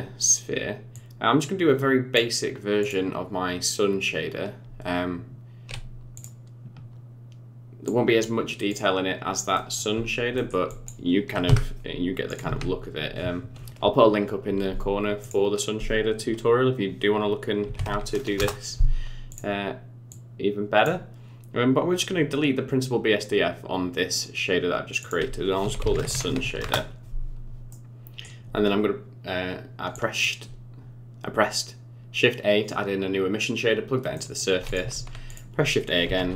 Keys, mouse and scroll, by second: 0.9 click, 2.8 click, 7.8 click, 8.7 click, 9.5 middle click, 10.0 scroll up 4, 10.3 middle click, 10.7 click, 11.4 Delete, 12.2 click, 12.4 shift+a, 20.1 click, 25.0 click, 27.7 middle click, 29.9 click, 34.1 middle click, 34.6 click, 34.9 shift+a.